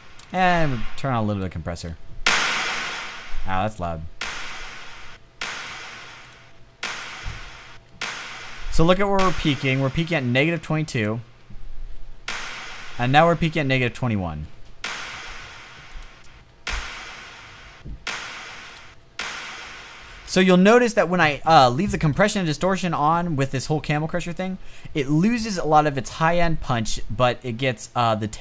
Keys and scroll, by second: 1.3 space, 2.3 space, 3.4 space, 4.5 space, 5.5 space, 6.1 space, 7.3 space, 8.1 space, 10.8 space, 11.5 space, 14.1 space, 15.9 space, 17.3 space, 18.1 space, 18.4 space, 19.7 space.